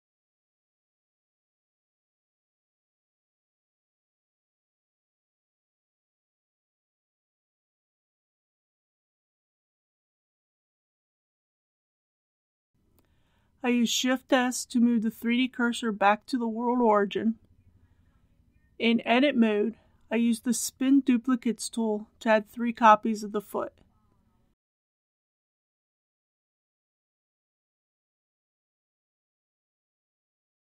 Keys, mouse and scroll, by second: 0.5 click, 2.0 s, 2.7 z, 3.1 KP_0, 6.8 Tab, 10.1 KP_7, 11.2 scroll down 1, 12.0 shift+middle click, 12.7 click, 13.1 shift+s, 15.4 click, 17.8 Tab, 20.5-24.2 drag, 26.1 KP_3, 26.4 KP_6, 27.9 click, 29.3 KP_4, 29.6 Tab.